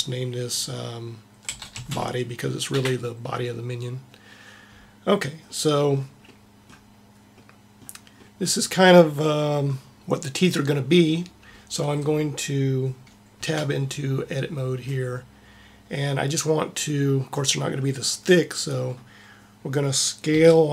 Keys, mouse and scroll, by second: 5.7-9.6 middle drag, 13.4 Tab, 20.2 s.